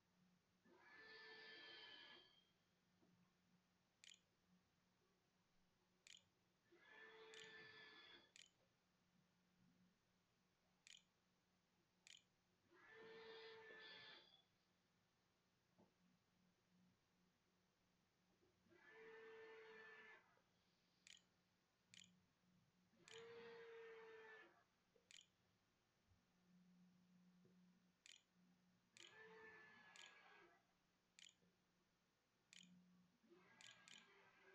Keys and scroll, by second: 0.0-2.7 typing, 3.8-9.5 typing, 5.2 Return, 5.9 Return, 10.5-12.7 typing, 12.7 Tab, 19.2-25.4 typing, 27.0-29.8 typing, 31.3 shift+z, 33.2-34.5 typing.